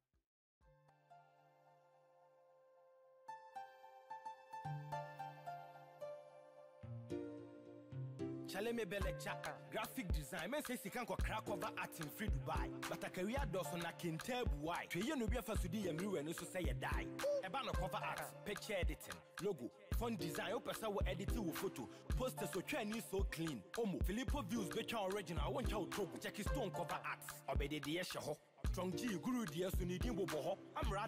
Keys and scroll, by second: 6.4 ctrl+-, 8.6 Down, 10.6 ctrl+=, 30.1 ctrl+a.